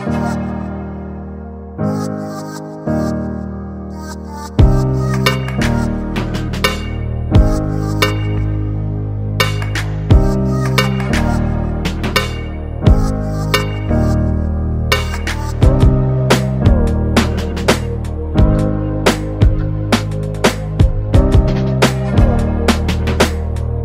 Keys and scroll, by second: 17.2 ctrl+space, 17.7 ctrl+space.